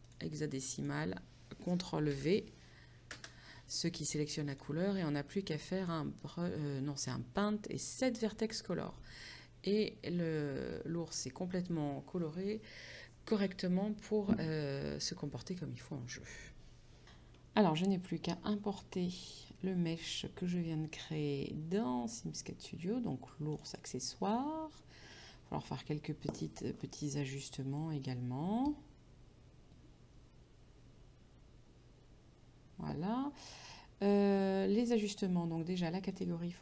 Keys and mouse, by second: 0.1 click, 2.2 ctrl+v, 3.2 Return, 4.6 click, 5.9 click, 8.0 click, 9.5 middle click, 19.4 click, 23.6 click, 35.1 click, 36.2 click.